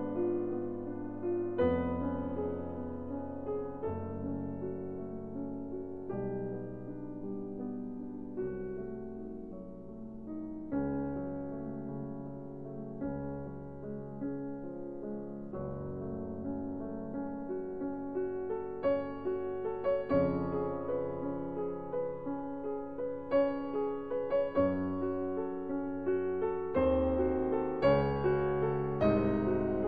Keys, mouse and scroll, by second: 0.0-1.7 drag, 2.1 p, 3.9 Tab, 4.6-6.3 drag, 5.2 Tab, 7.5 ctrl+r, 12.3-16.5 drag, 16.8 s, 29.3-29.8 drag.